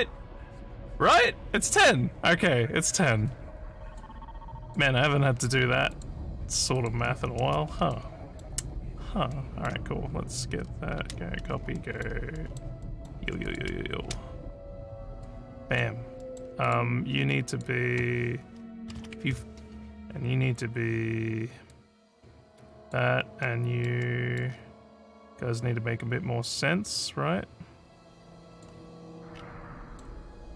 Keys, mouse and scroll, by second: 3.9 ctrl+click, 4.7 ctrl+click, 5.9 ctrl+click, 6.8 ctrl+click, 7.9 alt+middle click, 9.3 alt+middle click, 11.0 ctrl+c, 11.8 alt+middle click, 12.3 alt+middle click, 12.9 alt+middle click, 13.5 click, 14.0 ctrl+v, 15.2 click, 16.2 middle click, 16.7 click, 17.5 click, 21.7-22.9 drag, 23.4 middle click, 24.0 middle click, 24.5 scroll up 1, 25.3-28.6 drag, 29.3 scroll down 2, 29.8 middle click.